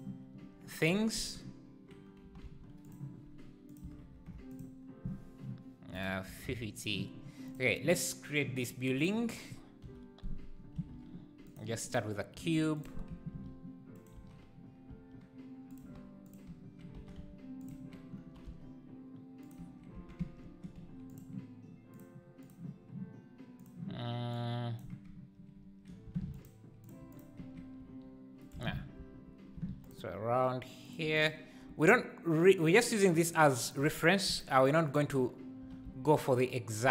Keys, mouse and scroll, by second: 2.2 g, 4.5 KP_0, 6.8 click, 7.5 click, 8.7 click, 9.1 shift+click, 12.0 shift+a, 12.3 s, 13.4 shift+s, 13.9 shift+right click, 14.1 shift+s, 14.9 s, 15.8 g, 17.0 s, 18.2 g, 20.0 Tab, 20.8 3, 21.2 click, 22.0-24.3 drag, 26.3 ctrl+r, 27.0 3, 27.1 click, 27.8 e, 28.6 ctrl+z, 29.8 ctrl+r, 31.0 3, 31.2 click, 31.6 e, 33.7 click, 34.6 shift+click, 34.8 shift+click, 35.6 g.